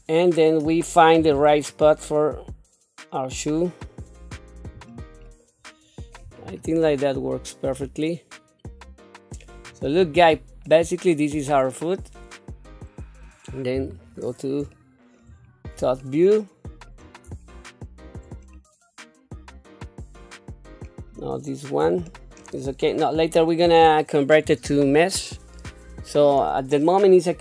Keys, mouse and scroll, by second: 1.2 g, 5.3 middle click, 6.4 scroll down 2, 7.0-9.9 middle drag, 10.2-10.6 scroll down 1, 10.6-13.2 middle drag, 14.6 shift+KP_7, 14.7 shift+middle click, 15.4-15.8 scroll up 2, 16.0 shift+middle click, 17.5 shift+middle click, 18.5-20.8 middle drag, 21.1 click, 22.1 shift+middle click.